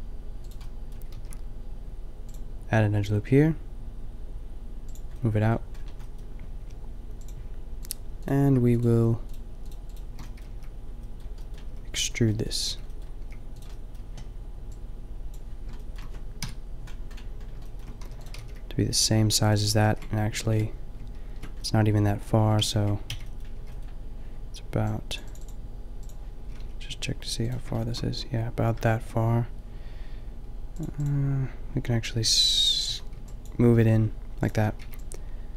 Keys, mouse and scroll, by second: 1.2 ctrl+r, 5.0 click, 5.5-7.8 middle drag, 8.6 middle click, 10.3 middle click, 10.5 b, 11.7 b, 12.7 b, 13.3 g, 14.6 click, 15.3 b, 15.3 g, 16.4 KP_5, 17.5 middle click, 18.0 e, 18.3-19.8 drag, 18.4 g, 19.9 ctrl+z, 20.4 ctrl+z, 22.6 ctrl+z, 23.2 b, 23.5 b, 26.0 b, 26.5 g, 32.9-34.8 typing.